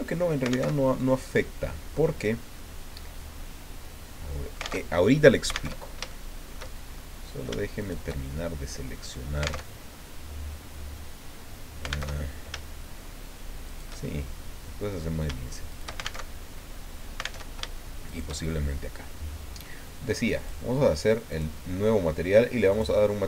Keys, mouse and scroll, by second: 0.7 alt+Tab, 2.5-4.8 drag, 4.8 alt+Tab, 5.7 alt+Tab, 6.1 alt+shift+click, 6.7 shift+scroll down 2, 6.9 shift+click, 8.2-9.3 shift+drag, 9.6 alt+Tab, 12.1 alt+Tab, 13.7 shift+right click, 14.0-15.2 shift+middle drag, 15.7 alt+shift+right click, 16.2 alt+shift+Tab, 17.4 alt+Tab, 18.1 shift+right click, 18.5-19.8 shift+drag, 20.4 click, 21.3 click, 22.7 click.